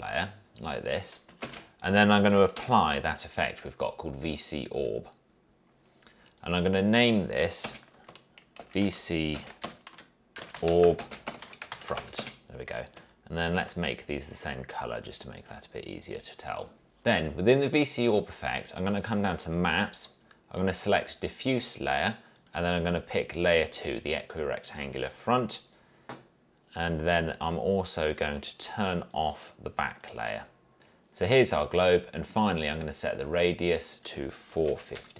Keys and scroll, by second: 1.6 ctrl+space, 2.2-3.2 typing, 7.8 Return, 8.5-12.6 typing, 30.8 ctrl+z, 34.4-35.1 typing.